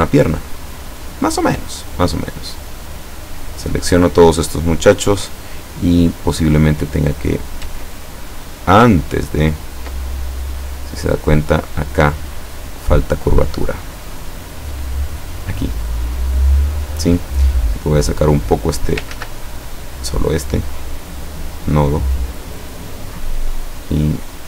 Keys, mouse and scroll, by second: 2.3 click, 2.9-4.1 drag, 8.4 click, 9.1-9.6 ctrl+scroll up 4, 10.1 ctrl+scroll up 2, 10.5 click, 11.4 click, 13.2 click, 14.9 click, 15.5-17.2 drag, 17.7-19.2 drag, 19.2 ctrl+z, 19.7 ctrl+click, 20.1-21.5 ctrl+drag, 22.2-24.1 drag.